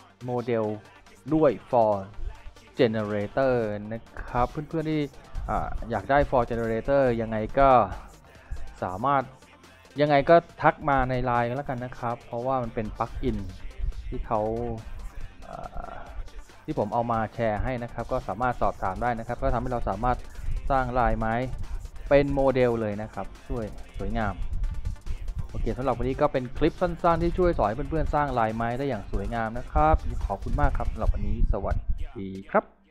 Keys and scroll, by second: 5.0 f.